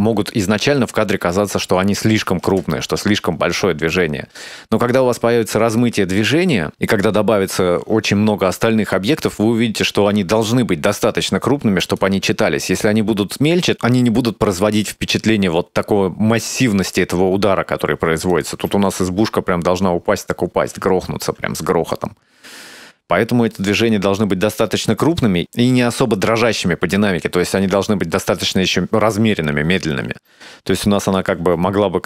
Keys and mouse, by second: 2.5 space, 6.7 space, 8.9-12.0 drag, 18.3 click, 18.6 space, 20.7 space, 21.9-24.7 drag, 28.8 space, 30.1 space, 31.1 click, 31.4 space.